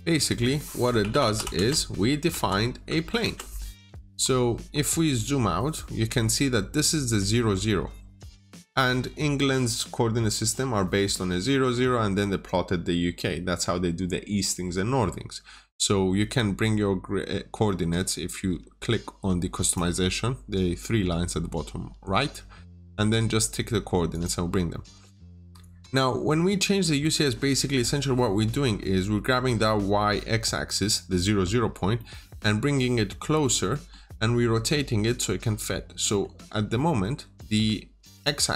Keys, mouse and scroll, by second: 0.9-1.2 typing, 2.2 Return, 2.8 typing, 3.1 Return, 4.1-4.9 scroll down 1, 4.9 middle click, 5.3-19.5 scroll down 1, 19.5 click, 25.3-26.9 scroll up 1, 26.9 middle click, 27.1-28.9 scroll down 1, 30.5-31.4 scroll up 1, 31.4-31.8 scroll down 1, 31.8 middle click, 32.4-33.6 scroll up 1, 33.6 middle click, 34.0-34.5 scroll up 1, 34.5-35.2 scroll down 2, 34.6 middle click, 35.2-35.9 scroll up 1, 35.9 middle click, 36.4-38.0 scroll up 1, 38.0 click.